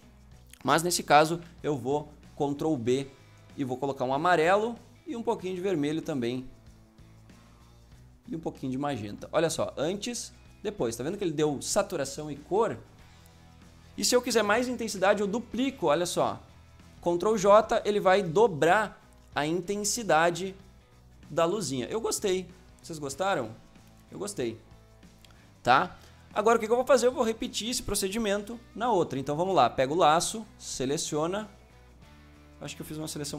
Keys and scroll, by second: 1.2 ctrl+b, 14.7 ctrl+j, 28.3 l, 29.9 l.